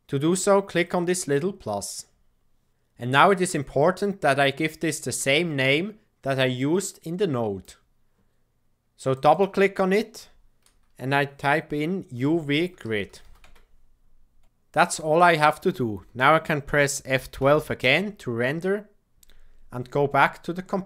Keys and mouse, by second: 0.4-3.7 drag, 6.5-7.7 drag, 9.1-14.7 drag, 19.1 F12.